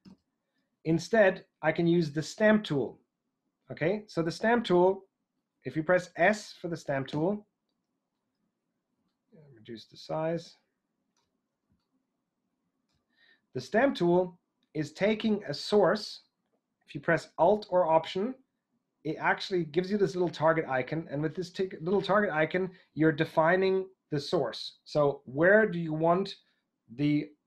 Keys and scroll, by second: 0.0 super+z, 7.1 s, 9.1 typing, 11.6 typing.